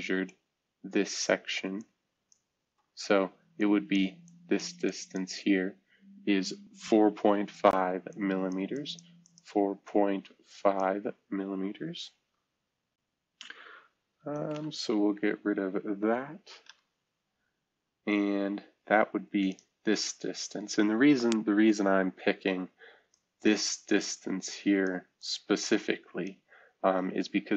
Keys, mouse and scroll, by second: 14.1 shift+F2, 14.5 Caps_Lock, 16.6 F2, 19.4-20.9 drag, 21.5 F2, 23.0-25.1 drag.